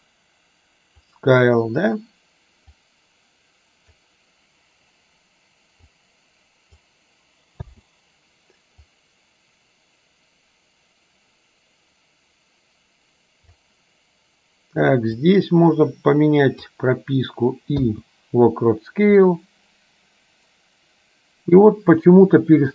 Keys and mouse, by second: 3.0-4.1 drag, 6.0-7.1 drag, 9.1-13.8 drag, 15.2 click, 15.6-16.8 drag, 19.3-22.7 drag.